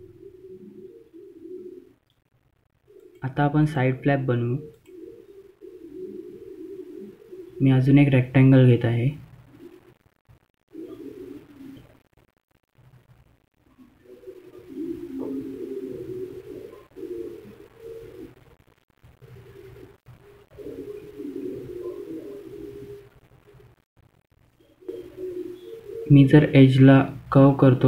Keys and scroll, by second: 1.4 F2, 24.7 ctrl+q.